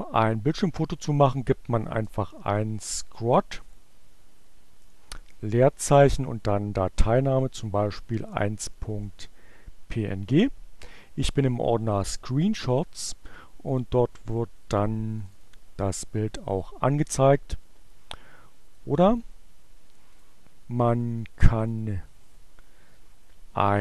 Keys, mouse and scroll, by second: 1.4-2.6 typing, 4.2-5.0 typing, 6.8-8.9 typing, 9.3 Return, 13.4 click, 14.9 click, 18.8 click, 20.1 click, 21.6 click.